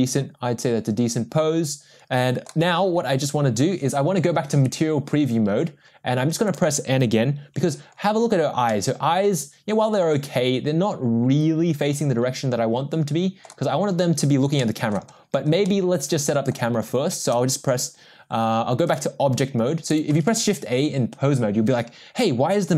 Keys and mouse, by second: 4.9 drag, 6.6 click, 8.7-13.5 middle drag, 14.6-14.9 middle drag, 15.6-16.5 middle drag, 18.8-19.8 drag, 20.2 shift+a.